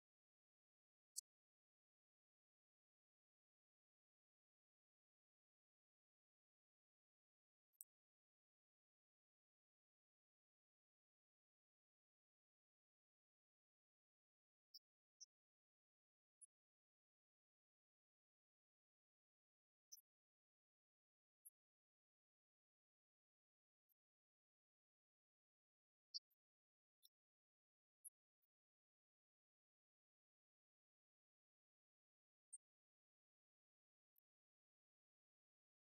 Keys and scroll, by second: 0.6 Right, 2.4 alt+Down, 3.4 Down, 4.3 space, 4.7 shift+Down, 5.5 ctrl+d, 6.0 Right, 17.6 Right, 18.5 alt+Down, 19.2 Return, 19.5 shift+Down, 20.3 ctrl+d, 20.8 Right, 22.1 Left, 25.8 Right, 26.5 Left, 28.7 Right, 29.1 Left, 29.5 shift+Right, 31.4 shift+Left, 33.8 Left, 34.6 Right, 35.2 shift+Right.